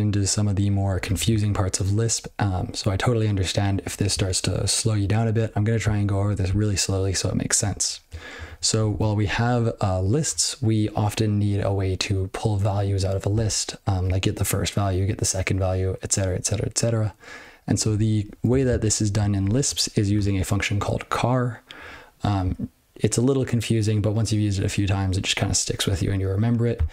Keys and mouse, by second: 8.3 ctrl+n, 8.5 ctrl+n, 8.9 ctrl+n, 8.9 ctrl+p, 9.2 ctrl+p, 9.4 ctrl+p, 17.8 ctrl+e, 18.4 ctrl+space, 18.7 ctrl+alt+b, 19.4 ctrl+g, 19.6 ctrl+n.